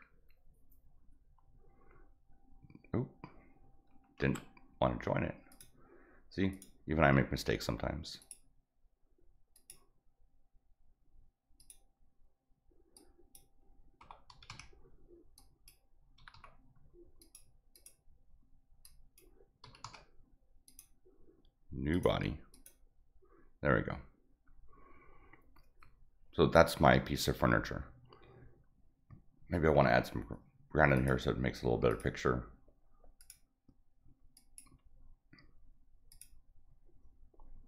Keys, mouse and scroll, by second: 4.2 ctrl+z, 5.5 click, 6.5 click, 7.5 middle click, 7.5 scroll up 1, 8.2 click, 9.6 click, 11.6 click, 13.0 click, 15.4 click, 17.2 click, 17.7 click, 18.8 click, 20.7 click, 21.9 click, 22.5 click, 31.0 click, 31.9 click, 33.2 click, 34.4 click, 36.1 click.